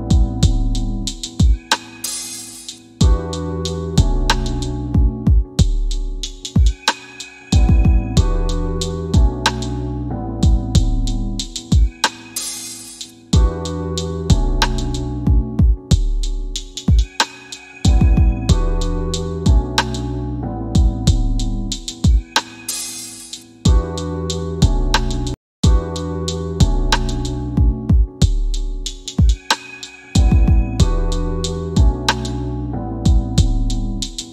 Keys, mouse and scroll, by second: 1.0 scroll up 1, 1.4 middle click, 7.0 scroll down 1, 8.8 scroll up 1, 10.0-10.7 scroll down 1, 10.7 scroll up 1, 11.3-12.0 scroll down 1, 12.0 middle click, 15.1 scroll down 1, 15.6 scroll up 1, 16.2 middle click, 20.1 scroll up 1, 22.9 click, 25.4-25.8 scroll down 1, 26.1 scroll up 1, 27.4 middle click, 28.0 scroll down 1, 28.9 scroll up 1, 30.8 middle click, 31.8 scroll down 1, 33.7 scroll up 1.